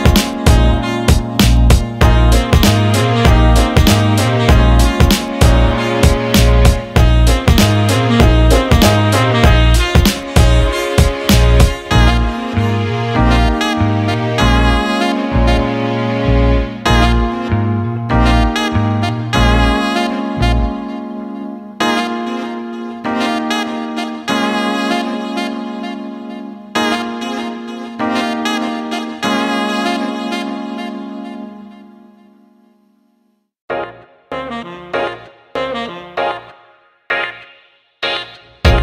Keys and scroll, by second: 14.2 a, 14.6 s.